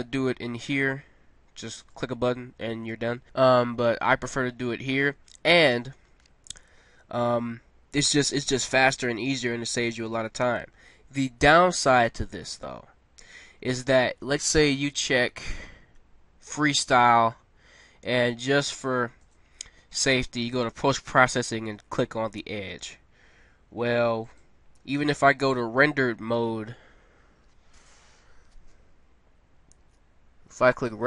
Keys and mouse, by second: 0.0 Escape, 1.9 click, 16.4-18.3 drag, 19.1-22.5 drag, 24.3-26.1 drag, 30.7 click.